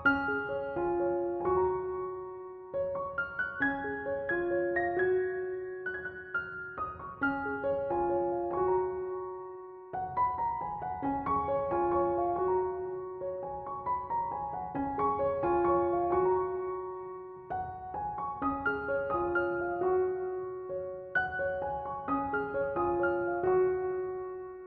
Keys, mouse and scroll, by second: 2.0-5.6 shift+middle drag, 8.6 click, 13.7-16.7 middle drag, 16.9-20.0 drag, 23.3 click, 24.1-24.6 drag.